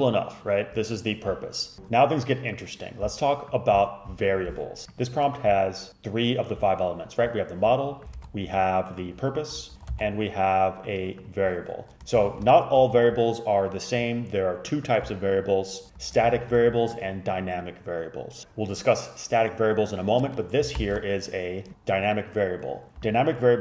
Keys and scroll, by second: 8.3 ctrl+c, 9.7 shift+Up, 9.8 shift+Up, 10.0 ctrl+c, 12.4 shift+super+Up, 20.9 shift+super+Left.